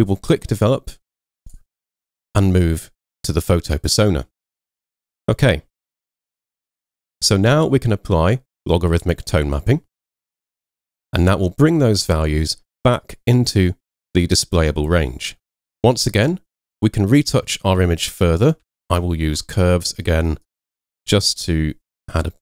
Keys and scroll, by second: 18.7 super+m.